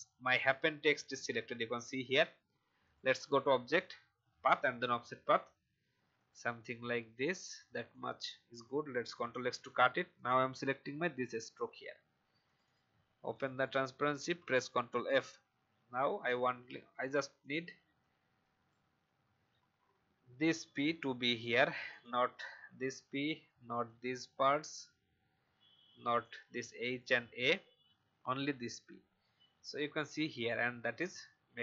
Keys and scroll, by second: 9.0 ctrl+x, 14.2 ctrl+f, 22.7 Delete, 27.8 Delete.